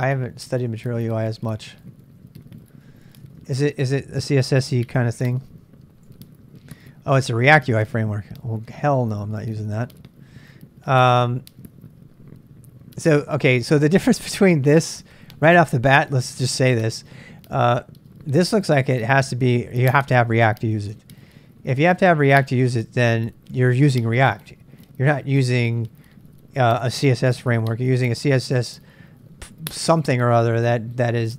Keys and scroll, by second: 0.0-3.5 typing, 6.0 j, 6.6 j, 8.2 j, 8.6 j, 8.9 j, 9.2 j, 18.4-19.1 typing, 20.4 typing.